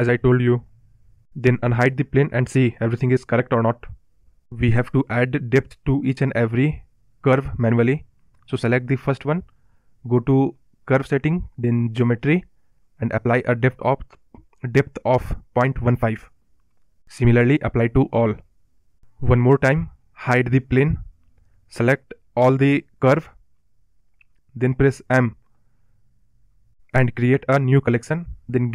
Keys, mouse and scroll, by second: 0.2-1.7 scroll down 2, 2.6 click, 3.3 click, 3.6 click, 4.7-5.4 scroll down 4, 5.4 drag, 6.2-7.4 drag, 7.4 BackSpace, 9.6-10.8 drag, 10.9 click, 11.7-13.2 drag, 13.8 click, 14.8-16.3 drag, 16.5 click, 16.7-18.7 drag, 19.1 click, 19.8 click, 21.1-21.8 scroll up 8, 22.0-22.7 scroll down 4, 22.8-23.5 scroll down 4, 23.5 click, 24.7 click, 26.9 m.